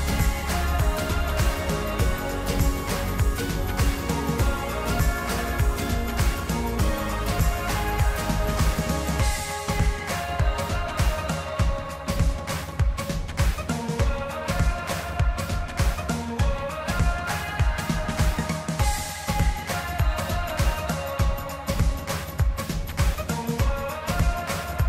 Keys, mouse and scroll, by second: 7.3 shift+click, 7.7 shift+click, 8.2 shift+click, 8.6 shift+click, 9.2-10.2 middle drag, 10.2 shift+click, 10.7 shift+click, 11.1 shift+click, 11.7 shift+click, 12.2-13.4 middle drag, 13.4 shift+click, 13.8 shift+click, 14.2 shift+click, 14.6 shift+click, 15.3 shift+click, 15.9-17.1 middle drag, 17.1 shift+click, 17.8 shift+click, 18.3 shift+click, 18.9 shift+click, 19.4 shift+click, 19.8 shift+click, 20.8 shift+click, 21.4-24.6 middle drag, 24.6-24.8 scroll up 1.